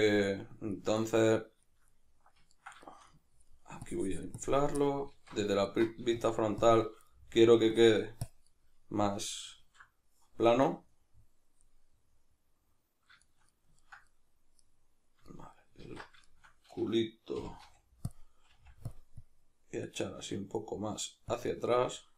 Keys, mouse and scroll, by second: 3.8 click, 4.8-6.2 middle drag, 5.2 alt+q, 6.2 shift+click, 7.1 middle click, 7.8 click, 8.5-18.2 middle drag, 9.6 alt+q, 15.8 alt+q, 17.4 g, 17.6 f, 18.2 click, 18.5 f, 19.2-22.1 drag.